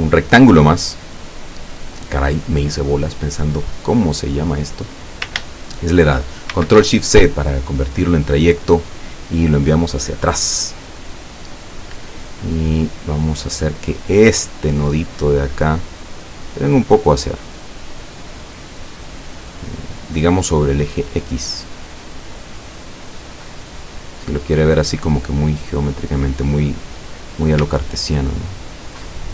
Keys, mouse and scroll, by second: 6.6 ctrl+shift+c, 8.1 click, 9.6 click, 12.6 click, 14.4-19.3 drag, 24.7-27.2 drag, 28.0-28.6 ctrl+scroll up 4.